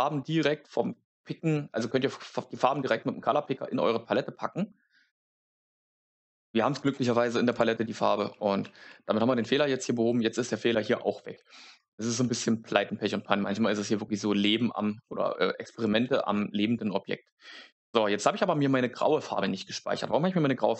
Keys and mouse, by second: 7.4 click.